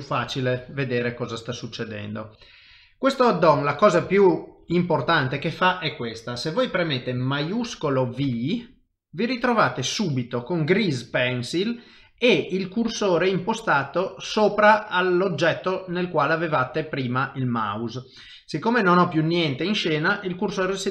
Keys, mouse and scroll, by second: 0.2 ctrl+alt+shift+v, 2.3 middle click, 3.6 shift+middle click, 3.7 shift+middle click, 4.1 ctrl+middle click, 4.7 shift+middle click.